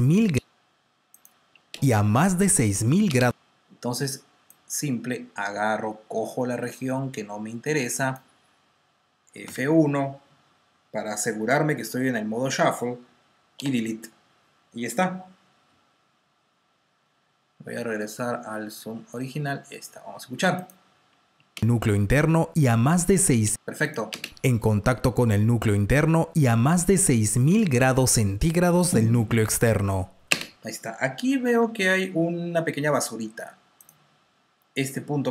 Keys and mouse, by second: 0.5 space, 1.1 click, 1.5 space, 3.3 space, 5.5 click, 9.4 F1, 20.5 click, 23.7 click, 24.0 space, 30.2 space, 31.5 typing, 32.8 typing, 33.7 click.